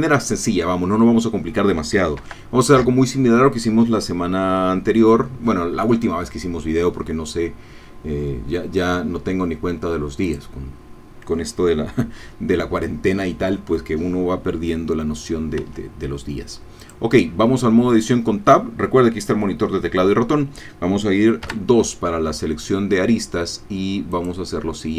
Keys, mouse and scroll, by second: 2.2 shift+a, 10.2 click, 15.6 Tab, 16.9 click, 21.4 2, 24.1-24.9 drag.